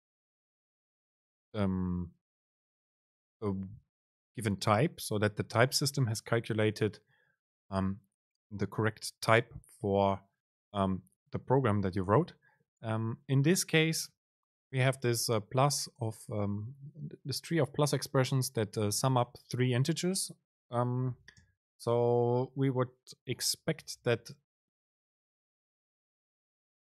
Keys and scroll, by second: 21.5 super+space.